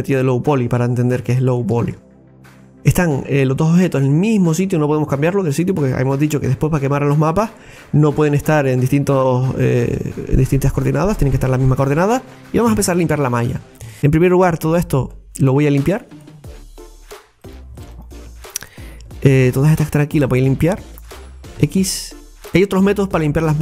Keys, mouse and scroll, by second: 1.2 scroll down 2, 1.6-2.3 shift+middle drag, 2.3 scroll up 2, 2.8-4.1 middle drag, 4.1 scroll up 1, 12.3 shift+middle click, 12.7 Tab, 13.3 scroll up 2, 13.9 middle click, 14.6 right click, 16.1 click, 17.5 right click, 17.8 alt+shift+right click, 17.9 alt+shift+right click, 19.7 alt+shift+right click, 20.6 alt+shift+right click, 21.6 x.